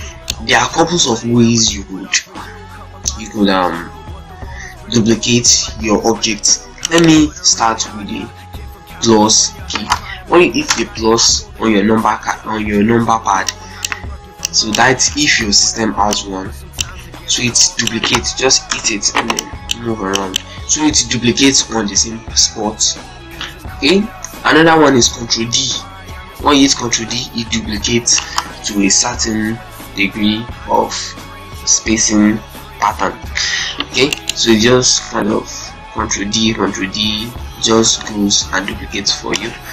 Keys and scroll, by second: 0.5 ctrl+space, 10.6 KP_Add, 18.5 KP_Add, 25.6 ctrl+d, 33.8 z, 34.3 ctrl+space, 35.5 ctrl+d.